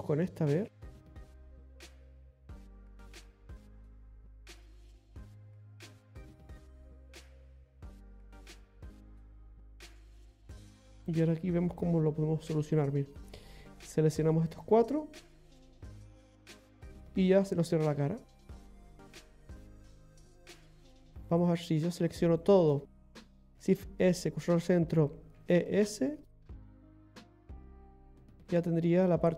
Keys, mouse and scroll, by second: 2.3 click, 4.2 click, 6.2 click, 11.0 click, 11.5 scroll up 1, 13.2 right click, 13.8 shift+right click, 14.7 right click, 15.3 right click, 16.5 f, 17.0-17.4 scroll down 2, 19.0 scroll up 2, 19.7 scroll down 2, 21.2 right click, 21.9 alt+shift+right click, 22.2 right click, 22.5 right click, 23.5 shift+s, 28.1 scroll down 2, 28.4 middle click.